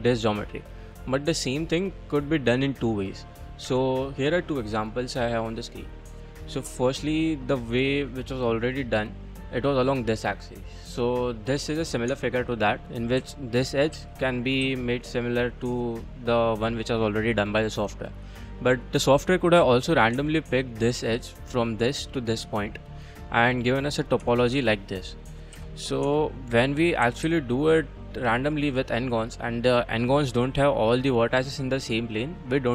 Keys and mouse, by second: 0.2-1.7 middle drag, 3.7 Tab, 4.9 click, 5.4 click, 5.8-7.1 middle drag, 8.0-8.9 middle drag, 10.2-10.6 middle drag, 11.1 middle drag, 11.6 click, 12.1 Tab, 13.2 2, 13.6 click, 13.9 g, 14.6 z, 16.1 click, 16.4 middle click, 16.7 click, 18.0 click, 18.6 click, 20.2 Tab, 22.8-23.2 middle drag, 23.5 drag, 23.6 middle click, 24.2 Tab, 24.5 Tab, 24.7 click, 25.0 middle drag, 25.5 2, 26.1 Tab, 26.6 click, 27.0 g, 27.3 z, 28.1 click, 28.4 middle click, 28.5 click, 32.3 middle click.